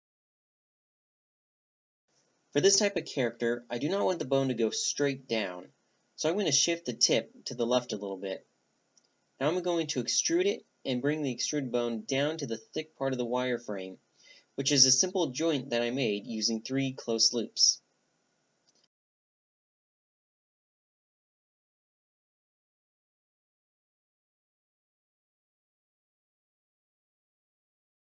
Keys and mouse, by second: 0.9-3.5 drag, 4.3-5.8 drag, 9.4-11.2 drag, 11.2-16.4 right drag, 16.4-18.3 drag, 17.5 e, 22.1-24.9 middle drag, 26.2 Tab, 27.1 Tab, 27.1 click, 27.8 z.